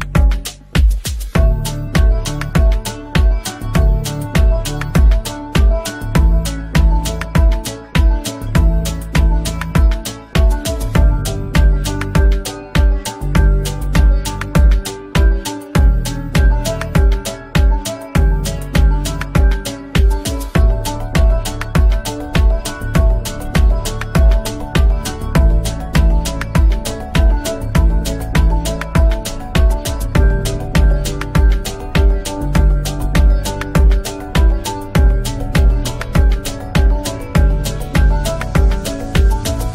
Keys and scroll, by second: 3.7 F3, 8.0 space, 16.3 ctrl+q, 17.8 F2, 21.1 space, 21.5 c, 21.8 Escape, 22.1 F2, 25.8 space, 26.1 F3, 27.3 shift+F2, 27.6 Escape, 31.9 Escape, 33.4 Delete, 36.7 space, 37.9 F3.